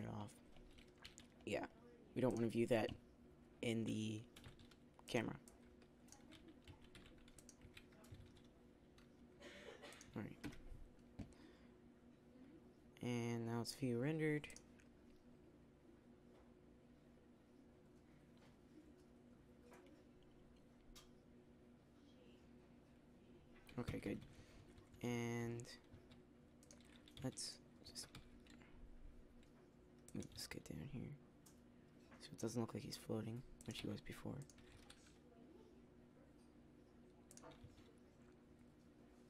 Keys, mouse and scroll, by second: 0.0-4.3 drag, 4.3 g, 5.1 drag, 6.2 g, 7.6 s, 10.3 KP_0, 14.5 drag, 23.8-25.7 Escape, 25.9 z, 27.0 z, 28.1 r, 30.2 g, 34.5 r, 37.5 click, 37.5 g.